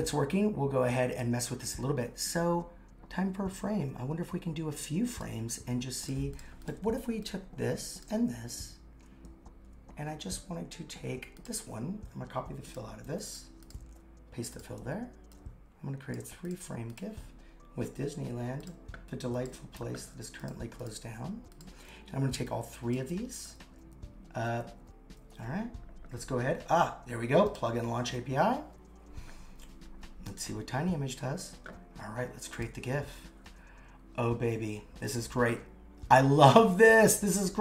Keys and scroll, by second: 13.0 super+c, 13.8 super+v, 19.8 super+c, 21.0 super+v.